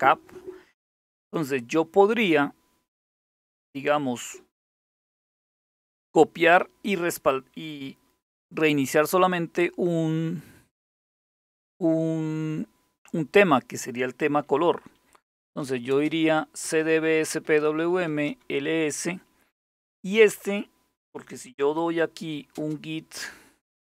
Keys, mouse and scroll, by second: 14.8-18.2 typing, 20.8-22.2 typing.